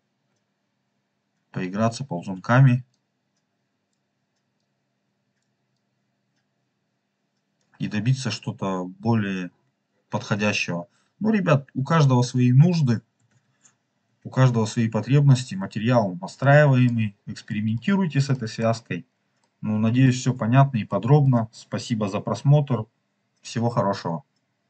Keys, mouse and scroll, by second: 2.8-3.9 drag, 4.5 click, 5.7-7.6 drag, 8.1 scroll down 1, 8.5 scroll up 2, 9.3 scroll down 2, 10.0 scroll down 2, 10.4 scroll up 2, 11.7 ctrl+z, 12.1 ctrl+z, 13.4 ctrl+z, 14.1 ctrl+z, 14.8 scroll down 4, 15.6-16.0 scroll down 3, 16.3 middle click, 17.0 scroll down 2, 17.5-17.8 middle drag, 17.8 scroll down 2, 18.2 middle click, 18.8-19.3 scroll down 2, 19.3 middle click, 20.8 middle click.